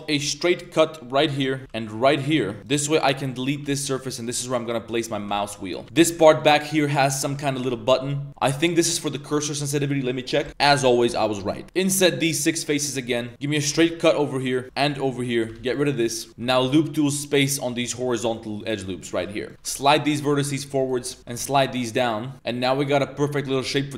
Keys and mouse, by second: 0.2 k, 1.6 k, 2.6 click, 2.6 z, 2.6 1, 3.3 ctrl+click, 3.6 x, 5.2 a, 5.3 a, 5.4 b, 5.8 middle click, 6.0 g, 6.7 middle drag, 7.0 3, 7.1 click, 7.5 ctrl+shift+click, 8.3 a, 11.6 ctrl+z, 11.6 click, 11.9 i, 13.0-16.6 typing, 13.3 click, 14.4 click, 15.1 click, 16.3 ctrl+z, 18.5 click, 18.9 3, 19.0 click, 19.4 ctrl+shift+click, 19.5 Tab, 19.5 ctrl+z, 19.8 g, 21.2 g, 22.5-23.0 middle drag, 23.4 e.